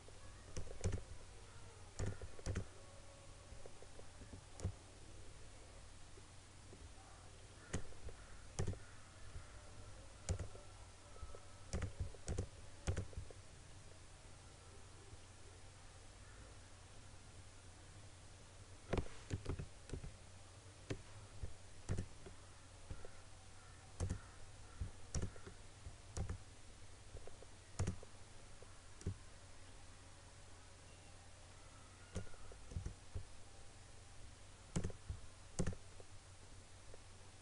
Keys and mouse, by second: 19.4 click, 19.5 ctrl+z, 22.0-32.8 drag, 32.8 right click, 34.8-37.4 drag.